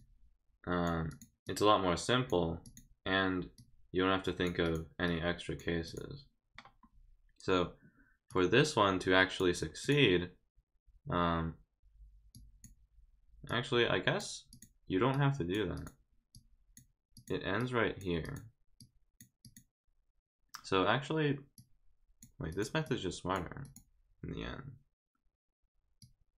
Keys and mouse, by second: 1.1 click, 1.4 click, 2.6 click, 3.6 click, 4.6 click, 5.0 click, 5.8 click, 8.3-9.4 drag, 9.8 click, 12.3 click, 13.5 click, 14.5 click, 15.1 click, 15.7 click, 16.3 click, 17.1 click, 17.6 click, 18.2 click, 18.8 click, 19.4 click, 21.5 click, 22.5 click, 22.8 click, 23.6 click, 26.0-26.3 drag.